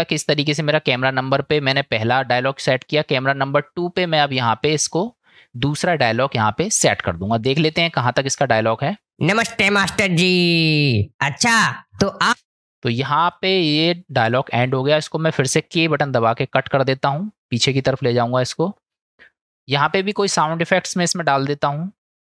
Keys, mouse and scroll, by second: 9.1 space, 12.3 space, 12.8 click, 15.7 k, 16.4-17.5 drag.